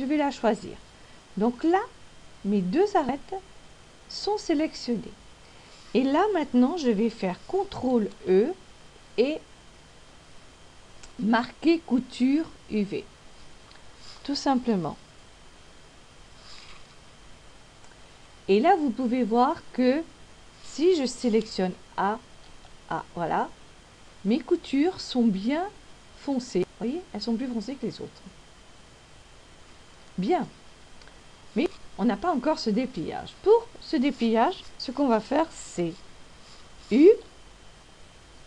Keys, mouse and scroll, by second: 2.7 middle click, 8.7 ctrl+e, 22.4 a, 23.4 a, 26.0 middle click, 28.7 middle click, 31.7 scroll up 1, 38.3 u.